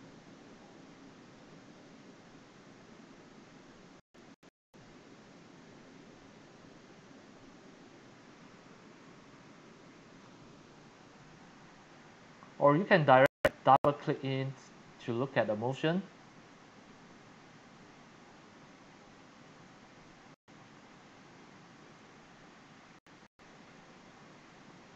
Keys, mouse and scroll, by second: 0.0-2.4 typing, 10.9 Escape, 11.0 click, 14.0 click, 21.2 click, 21.3 click, 23.7-24.9 alt+middle drag, 24.8 click.